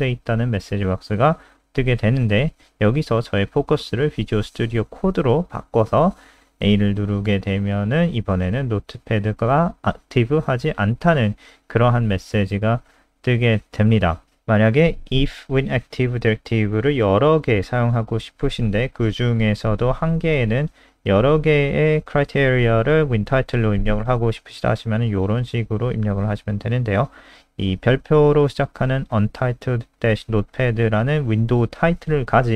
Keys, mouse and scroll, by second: 1.3 click, 6.2 a, 8.9 click, 11.8 alt+F4, 12.1 click, 13.0 scroll down 3, 13.6-14.3 scroll down 2, 14.3-15.3 scroll down 2, 16.0 click, 17.1 ctrl+c, 17.4 click, 18.9 shift+Right, 19.4 ctrl+v, 19.8 ctrl+s, 20.0 click.